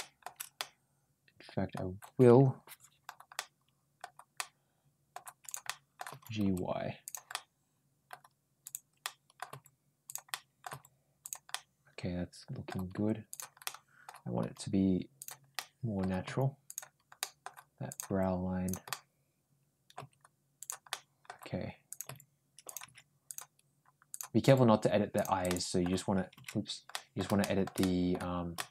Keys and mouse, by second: 0.4-1.6 middle drag, 3.2 middle click, 4.2 middle click, 5.3 click, 5.5 middle click, 5.9 g, 7.1 middle click, 8.4 click, 8.8 middle click, 9.3 g, 10.1 middle click, 11.3-12.5 middle drag, 11.3 g, 12.8 g, 13.5 middle click, 14.2 g, 15.4 middle click, 16.1 g, 17.0 middle click, 17.7 click, 17.9 g, 18.7-19.8 middle drag, 20.5 g, 20.7 middle click, 21.7 click, 21.9 g, 23.1 click, 23.9 click, 24.3 ctrl+g, 25.2 click, 26.7 middle click, 27.2 middle click, 27.6 middle click, 28.4 ctrl+shift+middle click.